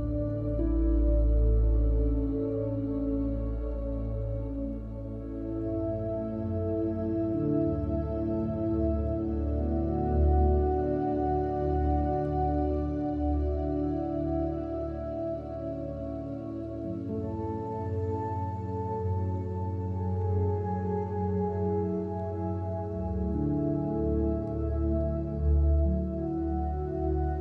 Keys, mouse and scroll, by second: 0.6 drag, 1.5 click, 6.1 click, 6.7-7.1 drag, 7.1 g, 8.6 shift+a, 9.8 click, 11.6 click, 12.5 x, 12.8 middle click, 13.8 middle click, 14.2 ctrl+middle click, 14.2 ctrl+s, 14.5-15.7 middle drag, 15.9 click, 16.3 click, 16.7 ctrl+j, 16.7 F2, 18.0 F2, 18.8 click, 19.4 click, 19.9 ctrl+j, 19.9 F2, 22.1 BackSpace, 23.1 click, 23.2-23.8 middle drag, 23.9 middle click, 24.1 middle click, 26.4-26.8 drag, 27.2 ctrl+j, 27.3 F2.